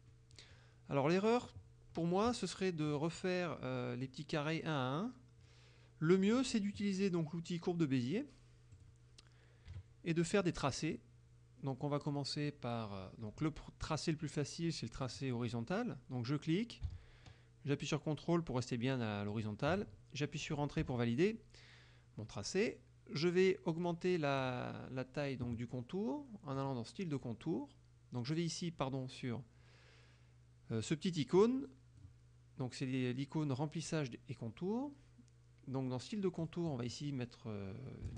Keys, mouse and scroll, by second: 0.2 middle click, 3.0 click, 8.8 click, 9.8 KP_Subtract, 10.4 click, 10.9 middle click, 12.1 middle click, 12.5 click, 15.1 click, 19.4 ctrl+click, 21.0 Return, 24.5 click, 26.6 click, 31.5 click, 36.5 click.